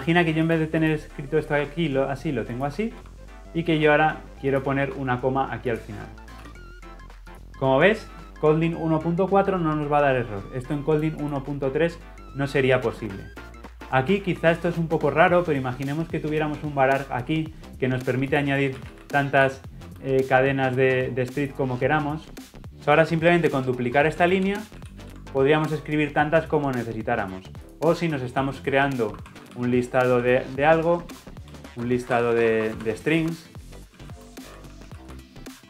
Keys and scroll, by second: 23.5 ctrl+d, 31.1 Return.